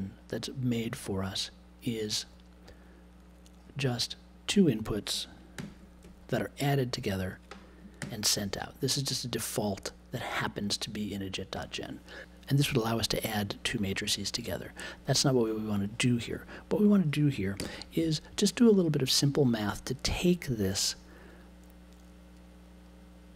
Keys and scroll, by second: 5.5 super+j, 8.0 super+j, 17.6 BackSpace.